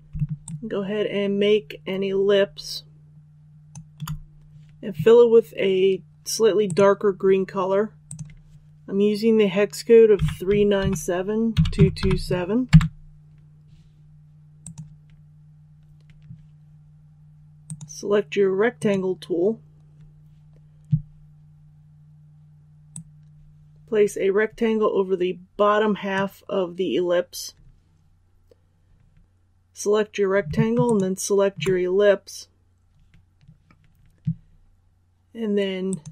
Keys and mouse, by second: 0.3-3.6 shift+drag, 6.5-9.0 drag, 10.1-11.9 typing, 14.5-26.5 drag, 30.7 shift+click, 35.8 click.